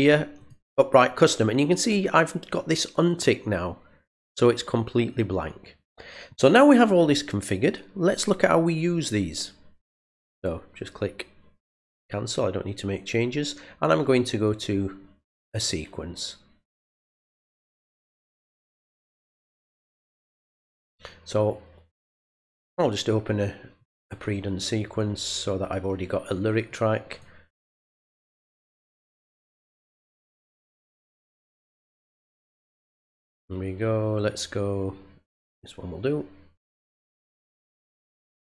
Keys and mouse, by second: 0.4 click, 11.6 click, 15.5 click, 16.7 click, 23.8 click, 26.6 click, 30.2 middle click, 32.0 click, 32.1 click, 35.3 click, 36.5 click.